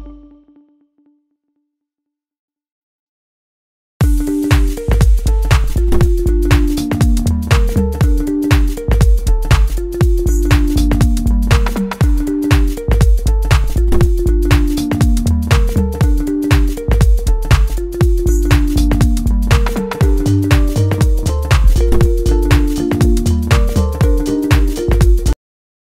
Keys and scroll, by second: 1.9 l, 5.1 l.